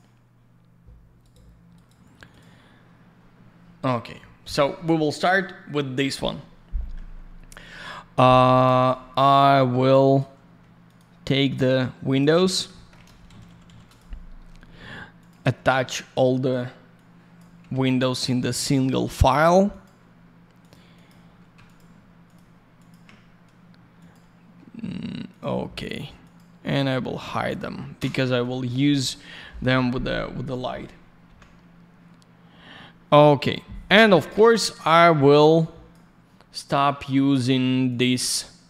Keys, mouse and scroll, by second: 12.5 ctrl+click, 12.7 alt+middle click, 12.9 middle click, 13.2 ctrl+shift+n, 13.8 click, 13.9 click, 15.1 click, 15.2 click, 16.9 click, 17.7 ctrl+ϕ, 18.4 click, 18.6 click, 19.6 click, 19.8 click, 20.0-20.4 scroll up 1, 20.5 click, 20.6 click, 20.9 click, 21.0 double click, 21.6 ctrl+click, 22.2 ctrl+click, 22.7 ctrl+click, 23.9 click, 25.3 click, 26.2 click, 27.3 click, 27.4 click, 27.9 ctrl+space, 28.6 alt+middle click, 29.4 middle click, 31.2 F10, 33.8 middle click, 34.0 middle click, 35.6 click.